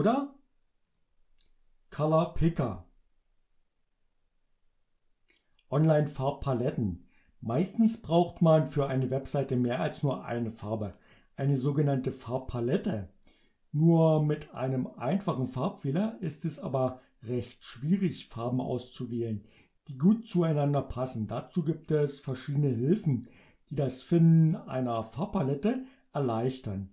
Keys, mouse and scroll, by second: 1.0 click.